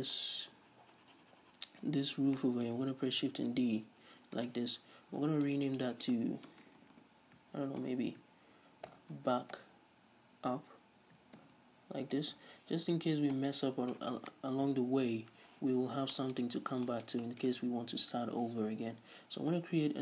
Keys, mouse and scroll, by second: 3.1 shift+d, 4.5 right click, 5.4-16.1 drag, 6.7 BackSpace, 13.4 Return, 15.8 scroll up 2, 16.1-20.0 middle drag, 19.6-20.0 scroll up 2.